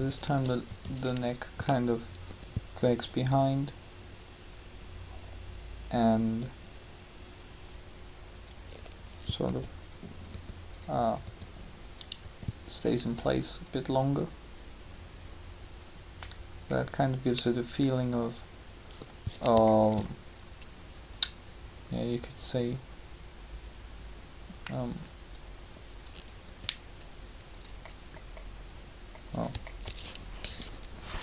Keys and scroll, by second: 9.4 r, 26.4 r, 30.6 3.